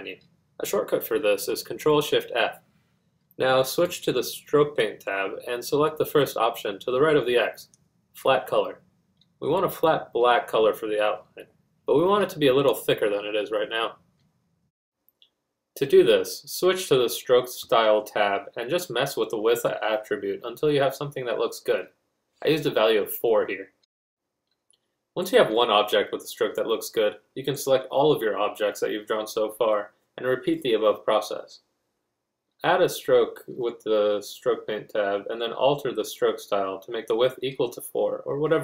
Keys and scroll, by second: 19.3 4, 24.8 g.